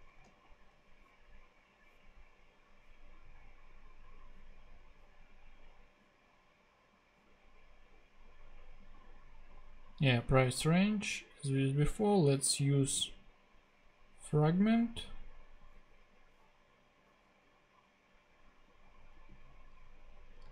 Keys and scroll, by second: 0.2 super+e, 1.1 super+g, 20.4 super+x.